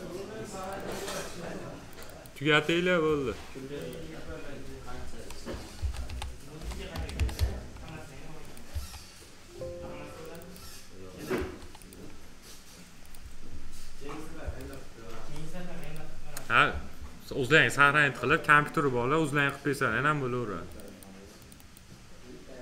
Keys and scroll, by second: 5.7 shift+r, 6.0 e.